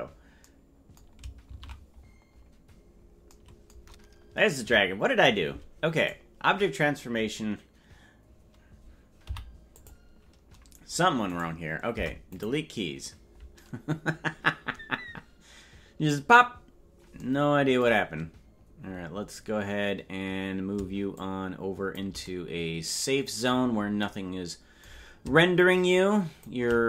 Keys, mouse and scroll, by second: 2.5 ctrl+z, 2.5-2.9 scroll down 1, 4.6 KP_Decimal, 6.0-7.6 right drag, 9.2 i, 11.3 right click, 11.9 Delete, 16.7-17.4 scroll down 4, 18.8-21.1 scroll down 6, 21.1-22.2 shift+drag, 25.6 shift+click.